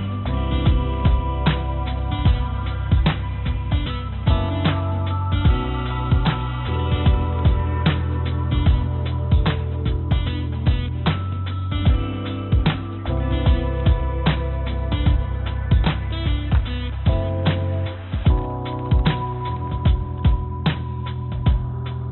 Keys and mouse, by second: 0.1 click, 2.2 g, 4.3 s, 7.1 g, 12.5 s, 17.2-18.7 drag, 19.4 g, 19.9 x, 21.0 g.